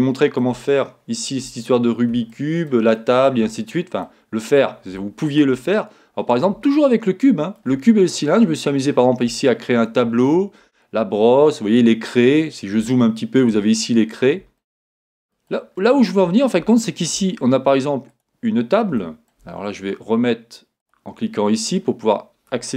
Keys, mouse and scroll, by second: 1.6-2.0 scroll up 2, 4.4-5.0 scroll down 2, 8.1-8.7 scroll up 2, 8.7-9.4 scroll down 2, 12.3 scroll up 2, 14.0 scroll down 1, 16.3 scroll down 2, 17.4-18.2 scroll up 2, 18.2 click, 19.0-20.8 shift+middle drag, 20.8 click, 21.8-22.5 scroll up 3.